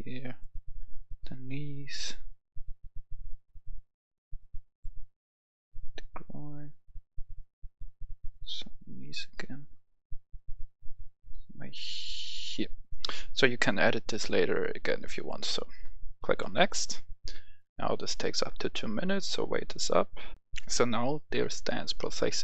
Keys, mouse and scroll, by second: 3.9-12.5 drag, 20.3 F10.